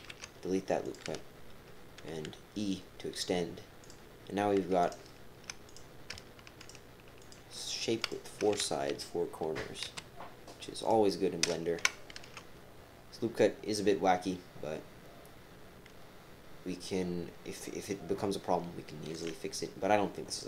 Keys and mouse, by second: 0.8 click, 2.1 e, 4.8 shift+click, 4.8-5.5 typing, 5.7 click, 6.6 shift+click, 7.0-7.8 typing, 7.2 shift+click, 8.0 shift+click, 9.7-11.4 typing, 10.8 click, 12.1 ctrl+r.